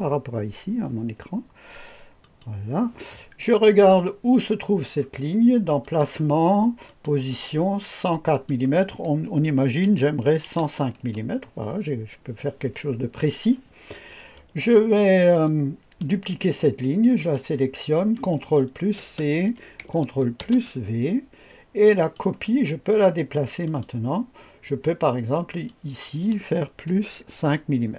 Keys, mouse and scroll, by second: 2.2 click, 5.8 click, 6.9 click, 8.3 click, 9.9 KP_1, 10.4 KP_0, 11.0 KP_5, 17.2 click, 19.0 ctrl+c, 20.4 ctrl+v, 22.0 click, 23.6 click, 25.5 click, 26.9 KP_Add, 27.3 KP_5.